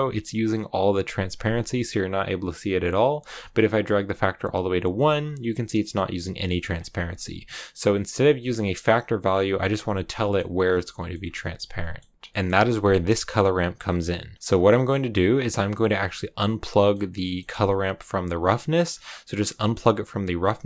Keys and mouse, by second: 7.8-9.1 drag, 10.8 middle click, 11.3 middle click, 11.8 middle click, 12.3 middle click, 12.7 click, 14.3 click, 14.7 middle click, 14.7 click, 17.1 middle click, 18.7 middle click, 18.7 click, 19.5 middle click, 20.2-20.6 drag.